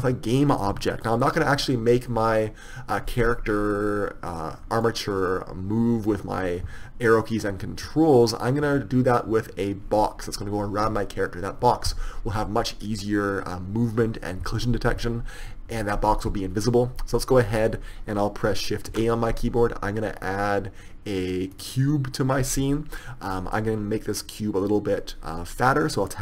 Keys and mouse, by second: 5.1-22.0 right drag, 22.0 shift+a.